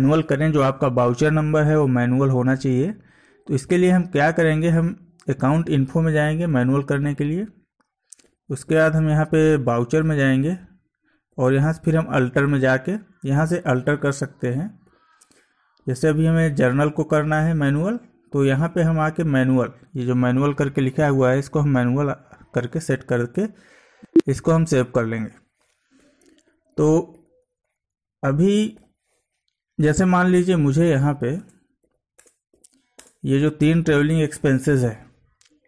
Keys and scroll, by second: 8.3 Down, 11.4 Down, 15.9 Down, 26.0 Escape, 30.8 Down, 31.4 space, 31.9 Down, 32.2 space, 32.6 Down, 33.0 space.